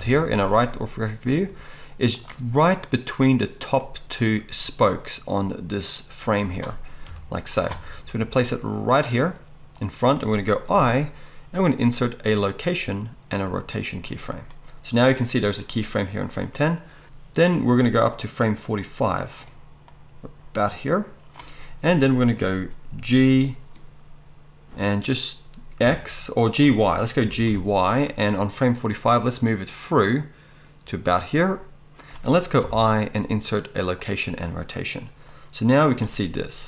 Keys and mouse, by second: 1.3 g, 7.0 KP_3, 8.0 g, 10.7 i, 17.9-19.4 drag, 19.4 middle click, 19.8-32.0 drag, 23.1 g, 27.2 g, 32.0-35.3 middle drag, 32.6 i, 35.3-36.6 drag.